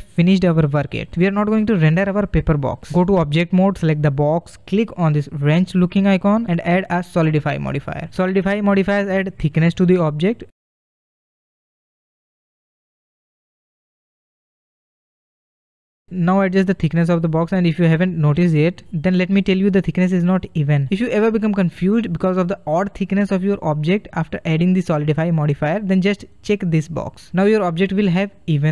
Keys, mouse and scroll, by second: 1.9 middle click, 2.7-4.2 drag, 4.2 middle click, 5.6 click, 6.1-6.6 scroll up 1, 6.6-9.5 shift+middle drag, 9.5-13.6 drag, 16.4-20.5 drag, 20.5 scroll up 2, 20.7-21.5 middle drag, 21.5-21.8 scroll down 1, 21.8-25.1 middle drag, 25.2-27.4 drag.